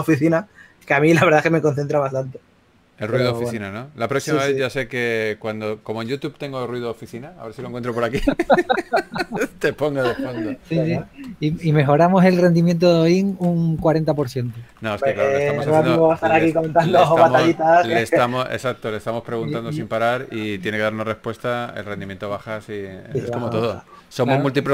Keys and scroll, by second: 9.9 s, 11.0 typing, 16.6 s, 20.5 typing, 23.9 s.